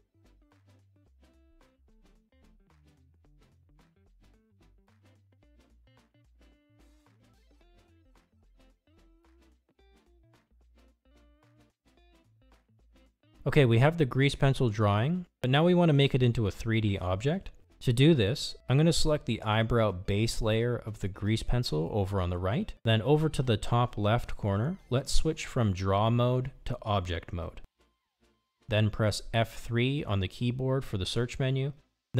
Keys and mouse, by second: 0.0 click, 0.7 click, 1.4 click, 2.2 click, 3.6 click, 4.3 click, 5.1 click, 6.6 click, 7.4 click, 8.1 click, 8.9 click, 9.5 click, 19.6 click, 27.7-29.1 drag.